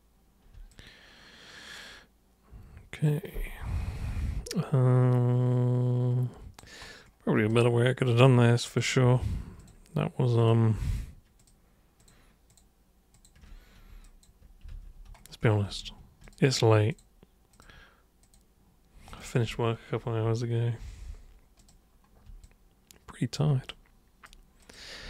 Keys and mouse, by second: 0.6-6.5 alt+super+drag, 7.5 super+right click, 8.6 super+click, 9.5 ctrl+shift+super+click, 10.4 ctrl+shift+super+click, 10.8 ctrl+shift+super+click, 11.4 ctrl+shift+super+click, 11.9 ctrl+shift+super+click, 12.4 ctrl+shift+super+click, 13.1 ctrl+shift+super+click, 13.9 super+space, 14.0 click, 16.2 ctrl+shift+super+click, 16.8 ctrl+shift+super+click, 17.5 ctrl+shift+super+click, 18.2 ctrl+shift+super+click, 19.1 ctrl+shift+super+click, 21.5 super+click, 22.4 alt+super+click, 23.7 super+right click, 24.6 super+click, 25.0 super+w.